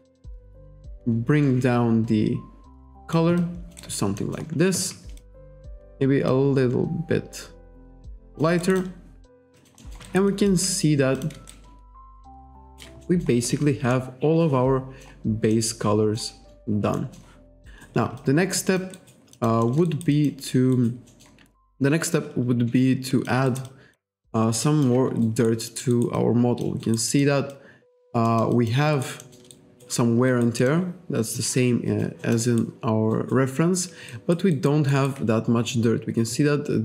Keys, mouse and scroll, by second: 0.5 click, 3.4 alt+click, 3.9 alt+right click, 4.2 alt+middle click, 5.2 alt+click, 6.3 click, 8.7 alt+right click, 8.8 alt+click, 9.6 alt+click, 9.8 alt+middle click, 10.1 alt+right click, 10.3 alt+click, 11.2 click, 11.6 shift+right click, 13.1 alt+middle click, 14.0 middle click, 15.6 middle click, 17.0 middle click, 17.7 alt+right click, 18.2 alt+click, 19.0 alt+right click, 19.4 alt+click, 19.7 alt+middle click, 20.2 alt+click, 20.8 alt+right click, 21.1 alt+middle click, 21.7 alt+click, 23.5 alt+right click, 23.7 alt+click, 24.7 alt+click, 25.3 alt+right click, 25.7 alt+middle click, 26.0 alt+right click, 26.2 alt+click, 26.9 alt+right click, 27.6 alt+click, 28.3 alt+middle click, 28.7 alt+click, 29.0 alt+right click, 29.3 alt+middle click, 29.6 alt+right click, 30.3 alt+right click, 30.7 alt+middle click, 31.9 alt+click, 32.3 alt+middle click, 32.5 alt+right click, 33.2 alt+right click, 34.2 alt+right click, 34.6 alt+right click, 35.0 alt+right click.